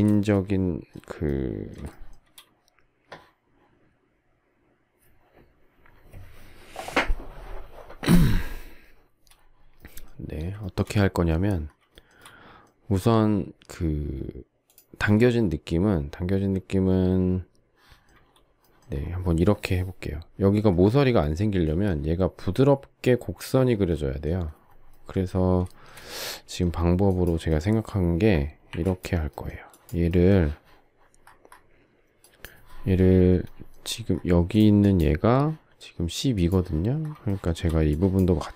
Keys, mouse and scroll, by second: 0.1 shift+middle click, 1.9 shift+middle click, 10.6 shift+middle click, 11.9 shift+middle click, 12.2 shift+middle click, 25.7 shift+middle click, 28.7 Delete, 37.2 shift+middle click.